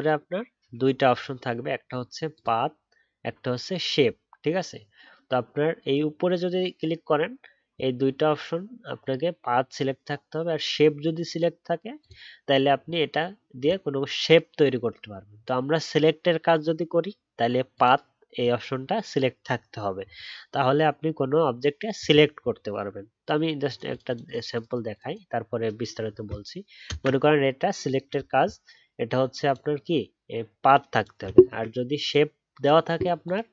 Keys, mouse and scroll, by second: 26.8 ctrl+Return.